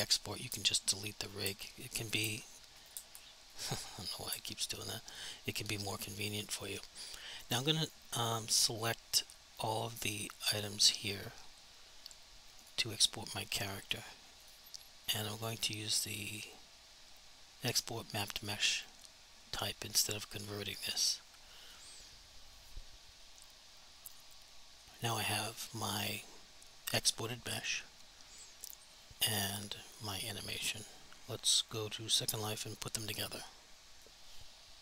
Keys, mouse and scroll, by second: 0.5 Delete, 1.3 right click, 1.4 Delete, 2.1 right click, 2.2 Delete, 2.8 right click, 2.9 Delete, 3.6 right click, 4.3 Delete, 7.5 click, 8.5 click, 9.0 click, 12.6 click, 18.8 click, 24.1 click, 28.7 click, 34.1 click.